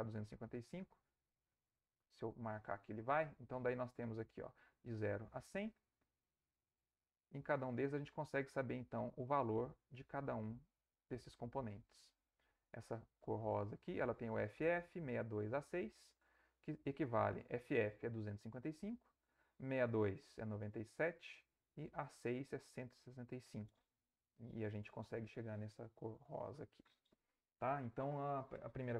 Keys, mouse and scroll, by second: 0.5 click, 1.4 click, 3.2-5.8 drag, 6.2-7.4 drag, 7.6-9.6 drag, 9.9-11.3 drag, 14.4 click, 15.5 click.